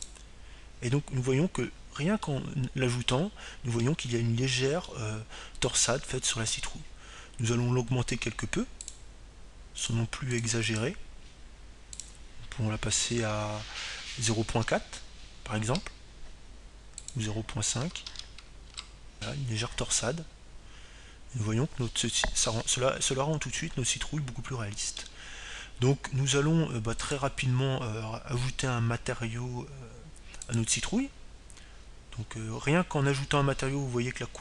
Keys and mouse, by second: 5.6-7.3 middle drag, 8.1-10.0 middle drag, 11.9-18.8 drag, 20.2-22.4 drag, 23.4-25.2 middle drag, 30.5-32.0 drag, 34.0-34.4 drag.